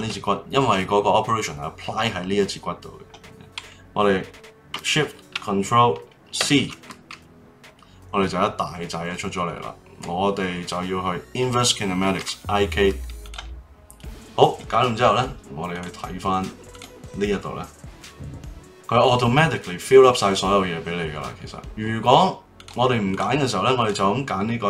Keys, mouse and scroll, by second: 6.4 ctrl+shift+c, 15.7 click, 16.7 click, 22.5 click, 23.8 click.